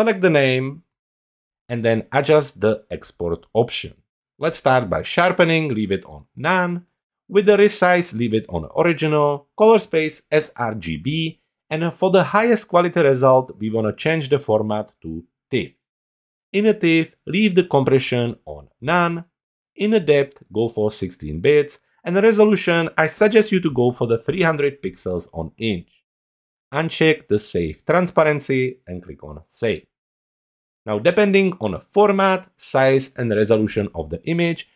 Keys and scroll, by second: 0.2 shift+s.